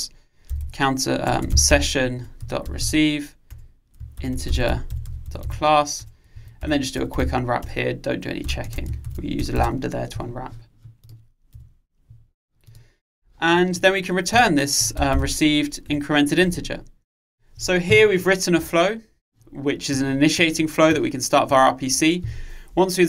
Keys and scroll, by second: 2.3 Return, 16.0 Return.